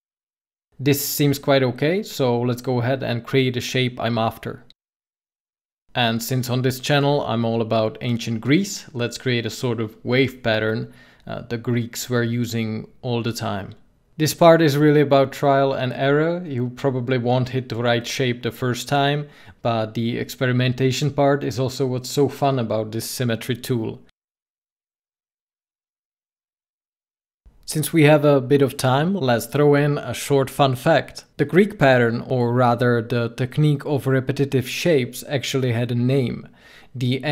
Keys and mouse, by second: 4.9 ctrl+z, 9.1-10.8 drag, 12.0 ctrl+z, 14.5-16.1 drag, 17.0 ctrl+z, 18.9-20.4 drag, 22.9 ctrl+z, 25.3-27.6 drag, 28.3-30.7 drag, 33.5 ctrl+z, 35.3-37.3 drag.